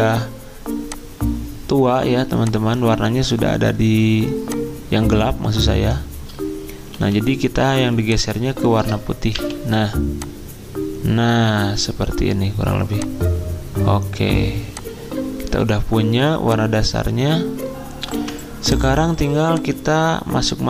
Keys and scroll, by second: 6.9-7.6 typing, 9.3 g, 14.2 g, 18.1 v, 19.3 z.